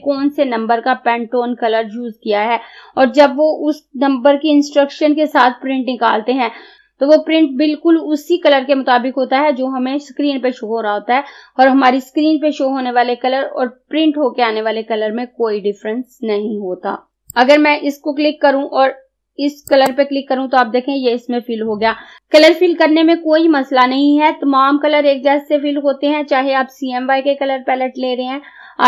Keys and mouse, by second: 17.1-19.7 drag, 19.7 click.